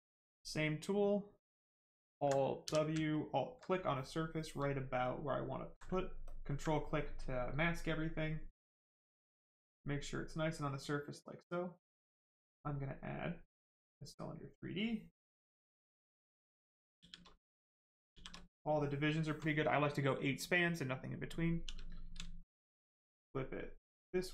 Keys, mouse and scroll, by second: 2.6 w, 5.0 click, 6.2 ctrl+click, 9.1 right click, 11.5 click, 13.7 click, 16.9 shift+f, 17.4 right click, 18.1 shift+f, 21.6 w, 22.4 shift+click.